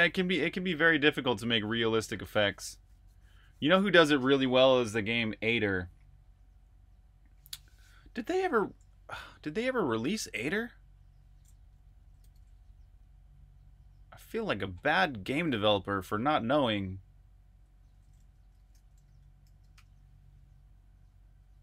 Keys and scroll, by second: 8.9 super+', 12.0 super+n, 18.1-20.3 typing.